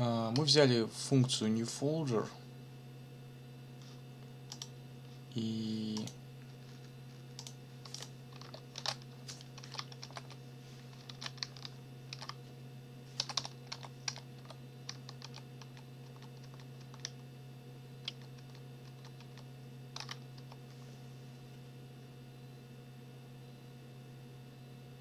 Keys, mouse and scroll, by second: 4.5 click, 6.0 click, 7.4 click, 7.9 click, 8.8 ctrl+shift+t, 9.6 ctrl+r, 10.0 ctrl+o, 10.1 ctrl+p, 11.1 ctrl+c, 12.1 ctrl+r, 13.2 t, 14.0 n, 14.3 z, 15.2 ctrl+r, 18.0 ctrl+r, 20.3 ctrl+Return.